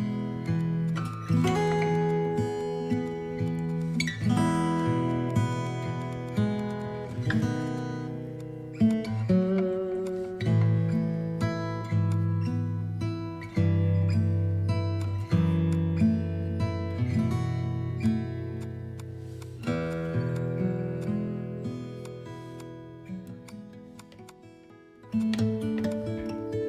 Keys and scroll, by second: 1.8 space, 2.6 space, 4.4 space, 5.6 space, 6.7 space, 12.1 space.